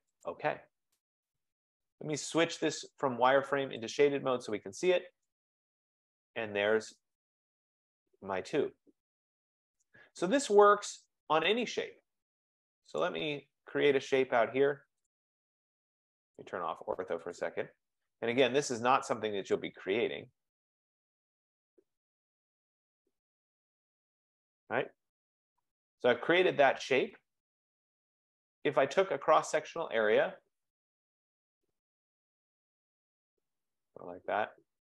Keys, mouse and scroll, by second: 0.5-2.8 drag, 4.1 double click, 8.5 click, 9.8 right click, 12.5 F15, 13.2 click, 13.8 scroll down 3, 13.9-14.8 scroll, 15.2 click, 17.5 click, 18.9 click, 19.6 click, 20.9 click, 21.6 click, 22.5 click, 23.2 click, 24.1 click, 25.5 Return, 28.0 scroll, 31.6 click, 33.6 click.